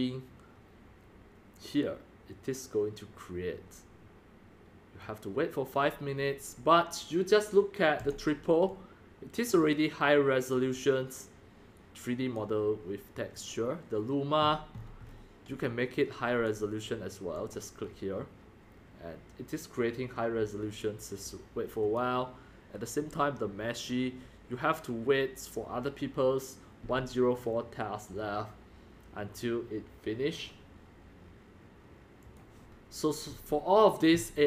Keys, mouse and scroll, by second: 2.5 click, 3.5 drag, 4.0 drag, 5.0 click, 7.8-13.4 drag, 13.5 click, 14.4-14.8 scroll up 5, 14.8 scroll down 7, 15.0 click, 15.0 click, 15.1 click, 16.4 click, 19.6 drag, 19.8 drag, 20.3 click, 25.8 click, 30.5 click, 32.2 click, 32.7-34.3 drag.